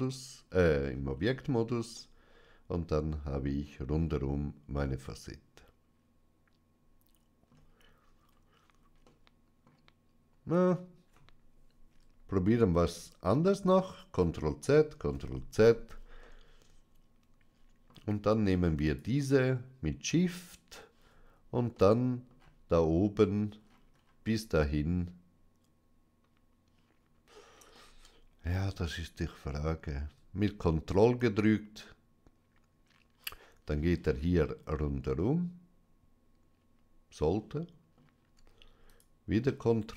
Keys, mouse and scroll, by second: 0.0-1.0 middle drag, 1.0-1.8 scroll up 2, 1.8-7.8 middle drag, 8.1-8.9 scroll down 2, 9.0-11.4 middle drag, 13.3 ctrl+z, 14.1 ctrl+z, 16.1-18.3 middle drag, 18.7-20.8 shift+drag, 21.6 middle click, 23.5-24.1 scroll up 2, 27.6 middle click, 31.1 ctrl+click, 34.6-35.7 middle drag, 37.2 middle click, 38.8 ctrl+click.